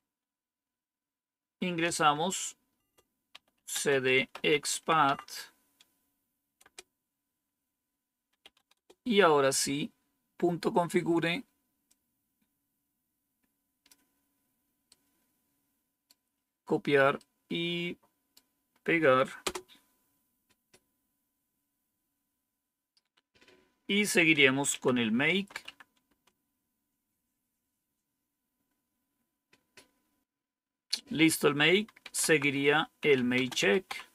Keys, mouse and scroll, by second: 1.7-11.3 typing, 6.5 Return, 11.7-13.8 drag, 14.8-16.0 right drag, 17.0-18.2 right drag, 18.8 right click, 19.3 Return, 24.6-26.0 typing, 31.7-34.1 typing.